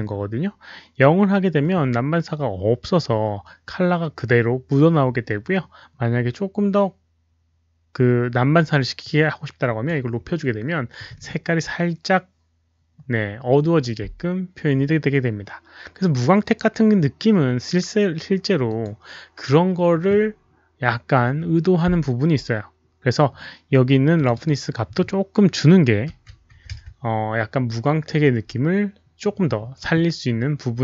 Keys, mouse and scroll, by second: 9.0-9.8 drag, 18.7 click, 21.6 click, 24.1 click, 24.3 click, 26.0 KP_Decimal, 27.8 Return, 27.8 click, 27.8 KP_5, 27.8 KP_Decimal, 29.4 click.